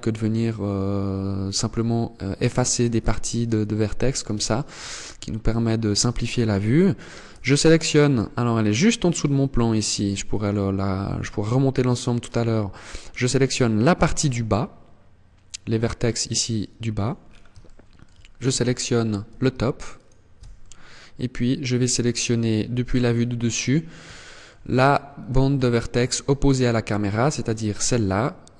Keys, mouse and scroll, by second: 2.4 KP_1, 3.8 shift+middle click, 4.4 scroll up 6, 5.0 shift+middle click, 5.8 scroll up 1, 7.2 alt+right click, 7.8 middle click, 15.9 middle click, 16.6-17.0 scroll down 4, 17.0 shift+middle click, 19.5 alt+shift+right click, 20.0 middle click, 22.1 KP_7, 22.8 scroll down 6, 23.6 shift+middle click, 24.1-24.8 scroll up 8, 25.0 shift+middle click, 25.6 scroll up 2.